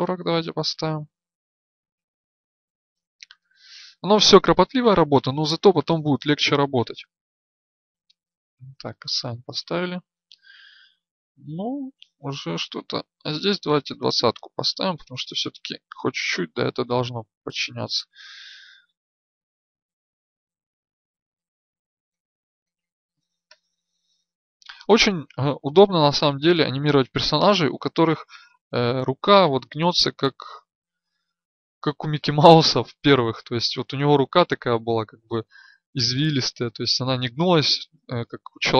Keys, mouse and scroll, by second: 9.5 Tab, 11.4 Tab, 13.3 right click.